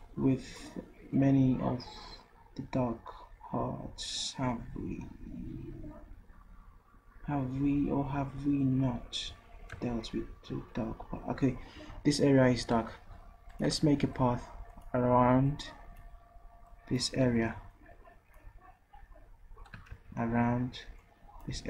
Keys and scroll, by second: 17.3 ctrl+z, 20.0 ctrl+z.